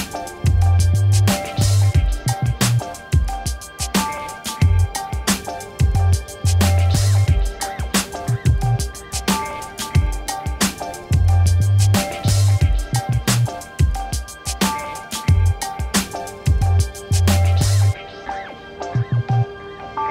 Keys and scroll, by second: 0.8 y, 1.5 Return, 1.8 ctrl+a, 2.5 v, 4.1 ctrl+d, 13.9 3.